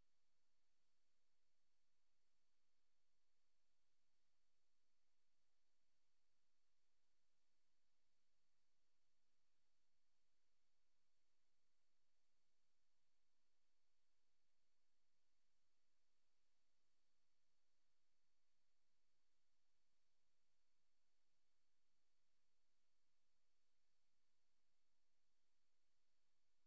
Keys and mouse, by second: 0.0 click, 0.5 click, 1.5 click, 2.5 click, 3.7 ctrl+z, 4.0 ctrl+z, 4.5 ctrl+click, 4.8 ctrl+click, 5.5 click, 6.0 click, 6.6 click, 8.8 click, 9.3 click, 11.3 Right, 13.6 click, 14.2 click, 15.2 click, 15.9 click, 16.8 click, 19.5 click, 20.0 click, 21.8 click, 23.5 ctrl+z, 24.5 click, 24.9 click, 25.2 click.